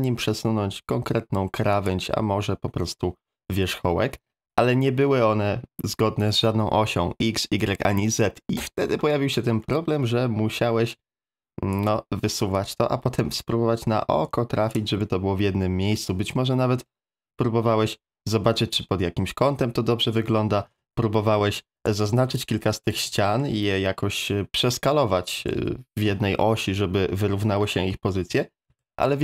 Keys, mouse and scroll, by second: 1.3 2, 1.7 click, 9.6 middle click, 11.0 click, 12.7-14.7 drag, 15.0-20.2 middle drag, 23.2 middle click, 25.4 a, 25.5 a, 28.3 ctrl+z, 28.7 ctrl+z, 29.1 ctrl+z.